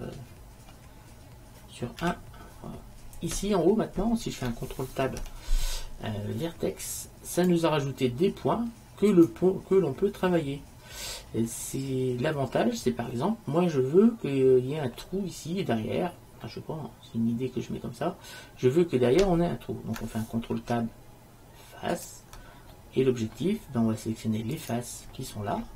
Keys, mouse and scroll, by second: 2.1 KP_1, 5.1 ctrl+Tab, 9.2-10.9 right drag, 13.2-15.1 middle drag, 16.5-18.8 middle drag, 20.6 ctrl+Tab.